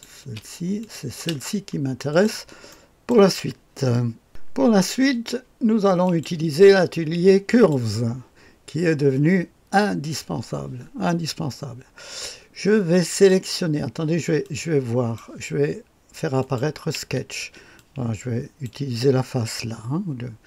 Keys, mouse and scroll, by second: 0.2 space, 0.8 click, 1.1 space, 2.1 click, 2.7 middle click, 3.1 click, 6.0 click, 7.5 click, 11.1-13.3 drag, 14.4 click, 16.4 click, 17.0 space, 17.8 click.